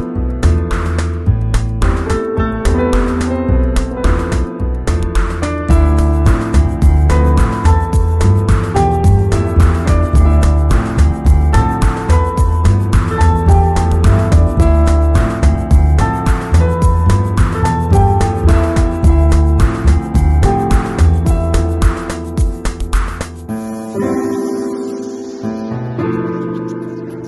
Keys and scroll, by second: 12.3 Return, 13.5 ctrl+Tab, 17.6 Return, 20.9 super+0, 21.2 super+-, 23.1 super+t, 23.9 alt+super+t.